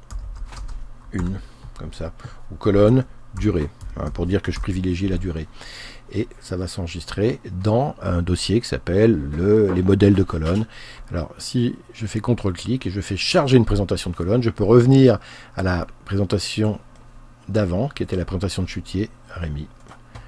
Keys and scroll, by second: 0.0-1.2 typing, 3.1-5.1 typing.